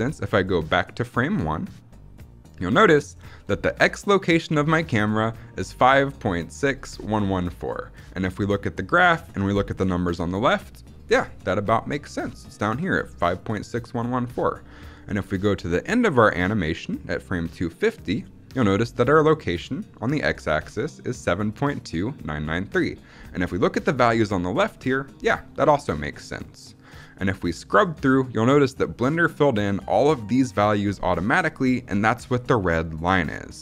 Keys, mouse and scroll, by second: 0.4-2.3 drag, 15.6-17.6 drag, 27.7-33.6 drag.